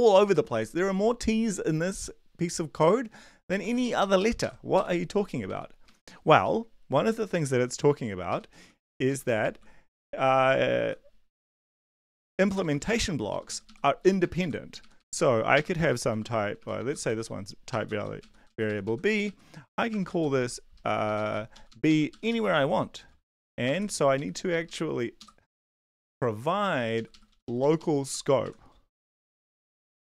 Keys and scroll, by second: 0.0 Down, 0.2 Down, 3.8 ctrl+Left, 4.0 ctrl+Left, 4.2 ctrl+Left, 4.7 Right, 5.3 Right, 5.4 Right, 8.8 Right, 9.1 shift+Down, 9.2 shift+Down, 9.4 shift+Down, 10.2 shift+Left, 10.8 ctrl+v, 11.4 ctrl+c, 11.4 ctrl+z, 12.1 ctrl+c, 12.2 Right, 12.5 Return, 12.7 Return, 12.9 ctrl+v, 13.3 Up, 13.5 Up, 14.0 Up, 14.2 Right, 14.8 ctrl+Right, 15.0 ctrl+Right, 15.5 BackSpace, 16.1 u, 17.1 v, 17.9 b, 18.2 Right, 18.5 Down, 18.7 Right, 19.1 Right, 19.3 Right, 19.7 Right, 19.9 BackSpace, 20.1 b, 20.4 Down, 20.7 Left, 21.0 BackSpace, 21.2 b, 21.5 Up, 21.7 Up, 21.9 Up, 22.1 Right, 23.0-23.7 typing, 23.7 Left, 24.1 Right, 24.5 shift+Left, 24.6 shift+Left, 25.2 shift+Left, 27.1 Up, 27.3 Up, 28.0 Left, 28.4 Right, 28.9-30.0 typing, 29.2 Left.